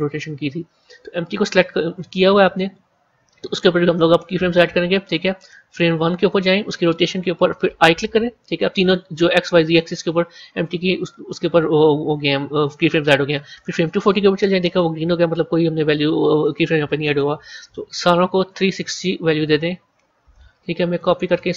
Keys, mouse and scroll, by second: 5.6-7.9 drag, 13.6-16.6 drag, 17.0-20.1 drag, 21.2-21.5 drag.